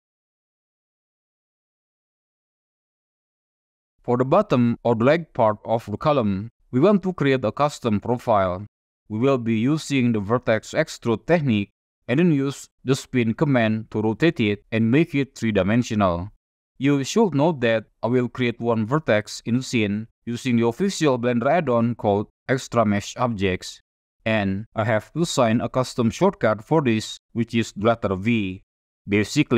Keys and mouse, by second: 0.7-1.1 shift+middle drag, 2.3-3.3 middle drag, 3.7-4.1 shift+middle drag.